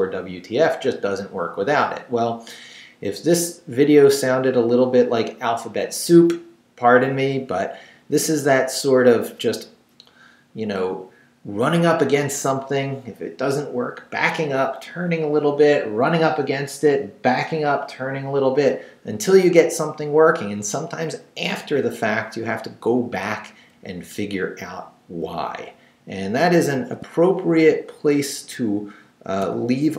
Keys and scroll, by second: 24.1 Down, 26.4 shift+Down, 26.8 shift+v, 27.2 shift+Down, 28.5 shift+Down, 29.4 shift+,.